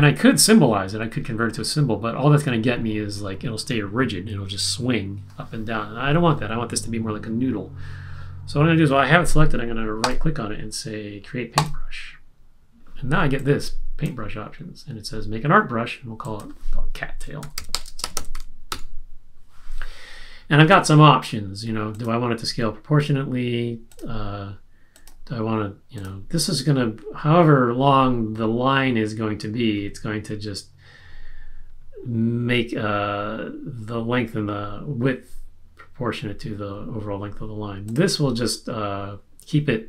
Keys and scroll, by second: 17.2-19.1 typing.